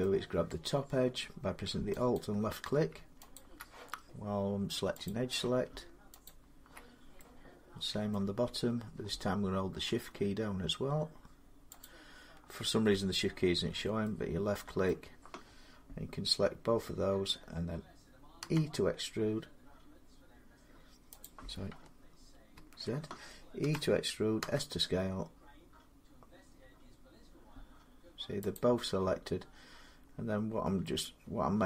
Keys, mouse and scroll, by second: 2.0 alt+click, 3.2 click, 4.9 click, 6.1 alt+click, 7.9 alt+middle click, 11.7 click, 14.7 middle click, 18.2 e, 21.1 click, 22.4 ctrl+z, 23.4-24.2 typing, 24.9-27.4 drag, 28.4-31.6 drag.